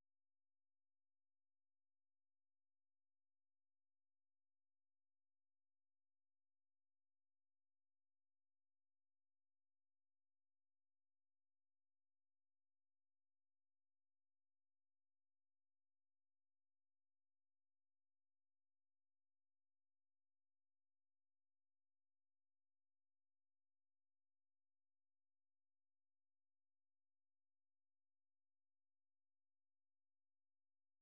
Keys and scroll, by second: 0.0-10.3 typing, 11.5 k, 11.9 k, 12.2 k, 12.8 k, 13.9-18.9 typing, 20.0 k, 21.7-28.6 typing.